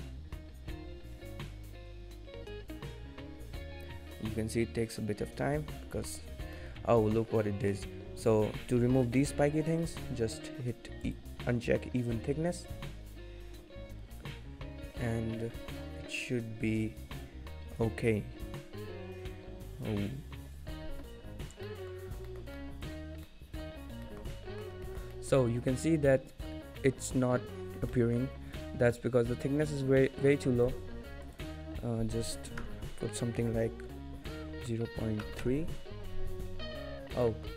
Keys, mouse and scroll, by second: 6.6 middle click, 7.9 scroll down 4, 8.8-9.4 scroll down 5, 9.4-10.2 scroll up 11, 20.5 click, 21.3-21.7 scroll down 4, 21.7 middle click, 22.1-22.9 scroll up 2, 22.3 shift+middle click, 23.0-23.6 scroll down 2, 23.3 middle click, 23.8-24.3 scroll up 5, 24.1 shift+middle click, 24.4 middle click, 24.9 shift+middle click, 25.2 middle click, 25.9 scroll down 2, 26.1 middle click, 26.9 middle click, 27.6 scroll up 3, 28.0 middle click, 30.3 click, 37.1 scroll down 3, 37.3 middle click.